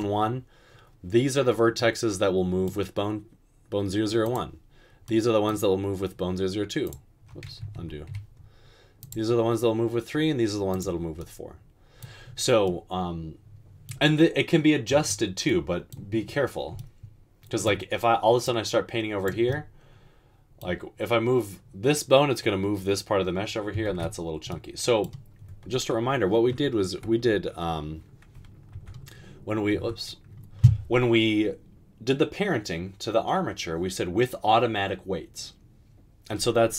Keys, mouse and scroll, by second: 7.8 ctrl+z, 24.0 ctrl+z, 27.0 ctrl+p, 28.9 Tab, 29.7 Tab.